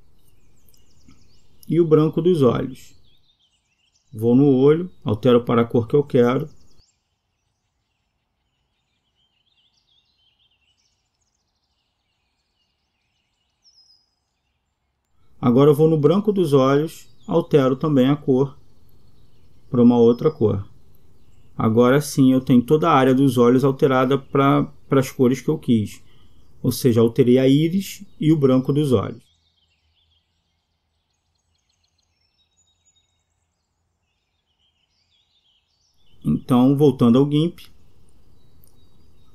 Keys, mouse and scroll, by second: 0.1-5.1 middle drag, 8.9-9.3 middle drag, 9.3 click, 14.3 Escape, 16.4-19.9 drag, 20.6 click, 29.1 Escape.